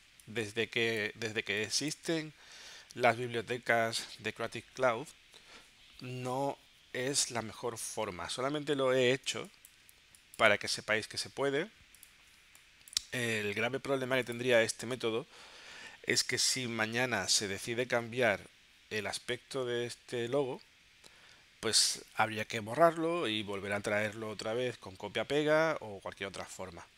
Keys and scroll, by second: 0.0 space, 9.3 space, 12.4 space.